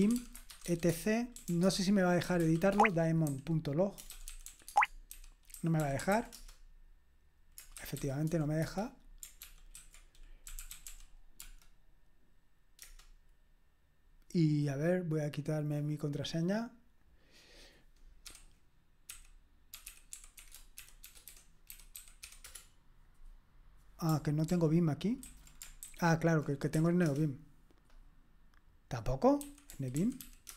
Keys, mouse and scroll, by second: 0.0-8.8 typing, 9.4 ctrl+p, 9.7 ctrl+a, 10.2-11.4 typing, 16.2 right click, 16.4 click, 17.0 middle click, 17.2 click.